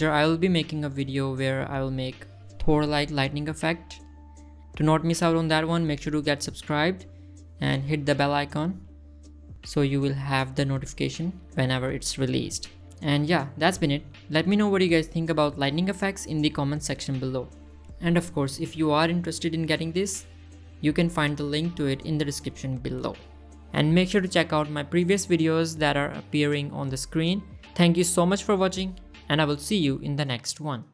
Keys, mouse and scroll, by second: 1.7 click, 14.3 click, 21.1 click, 22.3 scroll up 1, 22.4 middle click, 23.9 click, 25.4-25.7 middle drag.